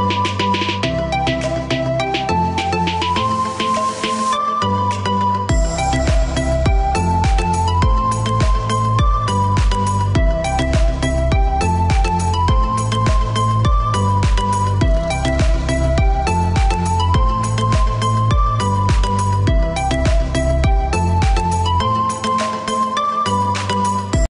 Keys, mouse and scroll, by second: 8.6 click, 9.3 right click, 9.9 click, 12.3 right click, 14.0 click.